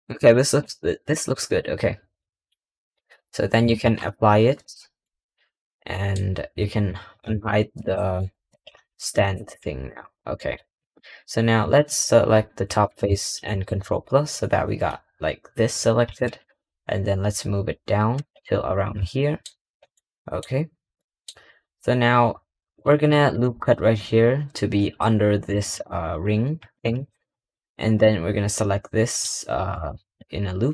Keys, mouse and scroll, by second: 0.0 middle drag, 0.2-0.8 scroll down 6, 1.0-1.4 middle drag, 1.5-2.1 scroll down 4, 2.1-3.6 middle drag, 4.5 click, 4.9-7.1 middle drag, 7.1 alt+h, 7.7 click, 8.4 click, 8.6 g, 9.4 middle click, 10.2-11.5 middle drag, 11.7 click, 19.0 middle click, 20.0 middle click, 20.3-20.9 scroll down 3, 20.9 middle click, 21.2-22.8 scroll up 2, 22.8 ctrl+r, 25.6 3, 26.8 alt+click, 27.4-27.9 scroll down 2, 27.9-30.7 middle drag.